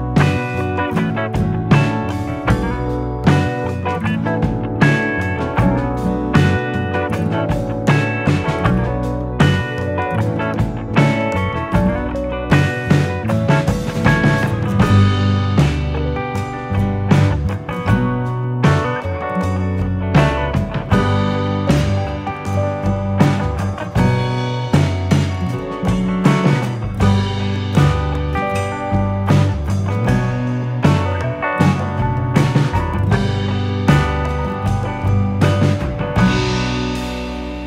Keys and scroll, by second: 2.7 ctrl+d, 6.8 t, 8.8 j, 26.8 typing, 35.2-37.0 typing.